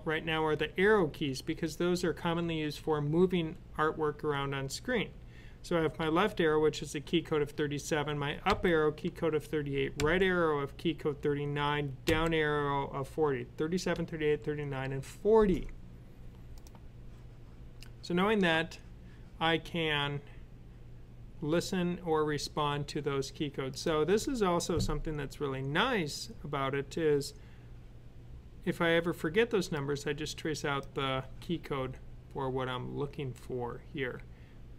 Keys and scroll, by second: 5.8 Left, 8.3 Up, 9.8 typing, 11.9 typing.